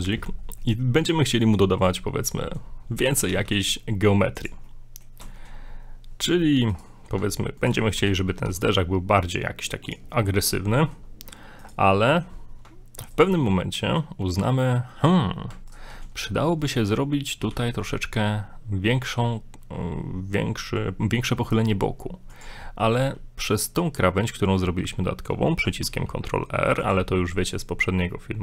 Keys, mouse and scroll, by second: 0.6 middle click, 1.3 middle click, 1.8 middle click, 1.9 scroll up 1, 3.3 ctrl+r, 4.6 middle click, 5.3 shift+middle click, 6.7 right click, 7.6 ctrl+right click, 8.0 ctrl+right click, 8.1 g, 10.1 middle click, 10.7 shift+middle click, 11.6 right click, 11.9 middle click, 13.1 right click, 13.4 middle click, 15.7 ctrl+right click, 16.0 middle click, 16.5 middle click, 17.4 g, 22.6 middle click, 23.5 right click, 25.8 ctrl+r.